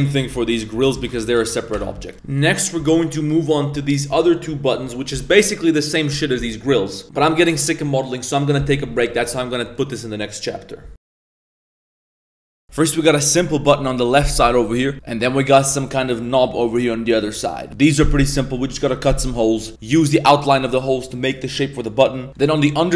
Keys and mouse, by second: 0.1 s, 1.3 shift+n, 1.7 Tab, 2.1 middle click.